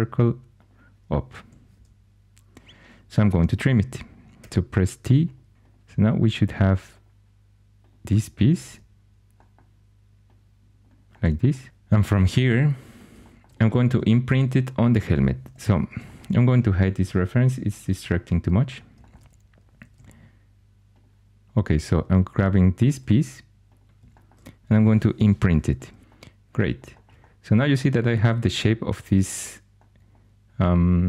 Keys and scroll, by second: 1.3 2, 4.3 t, 5.5 2, 8.6 g, 15.4 4, 19.8 2, 25.1 Caps_Lock.